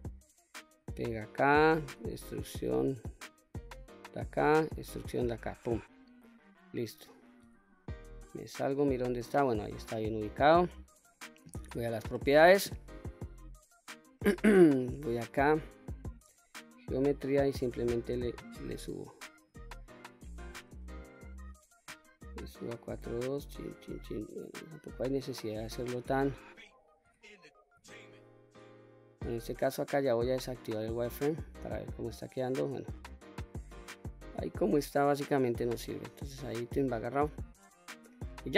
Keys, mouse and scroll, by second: 0.8 click, 2.0 e, 3.7 click, 4.4 e, 5.5 click, 6.1-6.8 scroll down 1, 7.5 Tab, 7.5-8.0 scroll down 1, 8.0 scroll down 2, 8.4-10.6 middle drag, 12.1 click, 14.2 click, 15.7-17.0 scroll down 1, 17.0-19.2 drag, 17.0-19.0 scroll down 1, 19.5-20.6 scroll up 2, 20.8-21.2 shift+middle drag, 23.0-25.5 drag, 27.1 Tab, 27.9 Tab, 30.1-31.8 drag, 32.2 click, 33.7-35.2 middle drag, 35.5-35.9 scroll down 1, 35.9-38.1 middle drag.